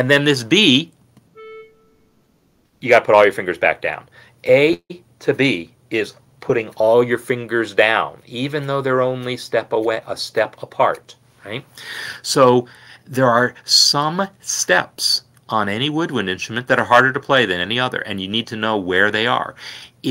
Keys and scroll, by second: 2.5 b.